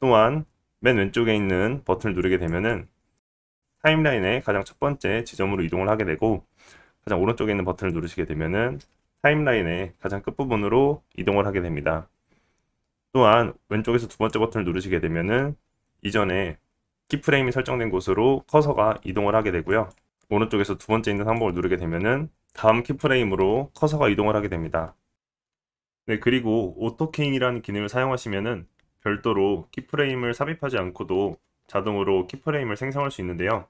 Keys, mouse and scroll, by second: 2.4 click, 7.8 click, 10.9-17.2 drag, 10.9-17.2 middle drag, 10.9-17.2 right drag, 20.0 click, 21.1 click, 25.1-33.6 drag.